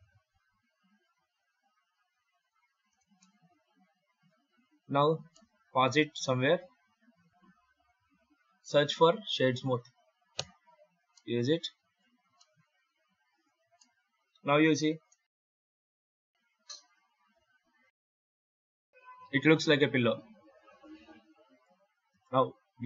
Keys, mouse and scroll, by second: 2.8 space, 3.0 middle click, 5.2 middle click, 8.4 F3, 11.0 middle click, 12.0 scroll down 2, 12.2 middle click, 13.6 middle click, 15.3 middle click, 18.6 middle click, 21.1 middle click, 22.0 right click.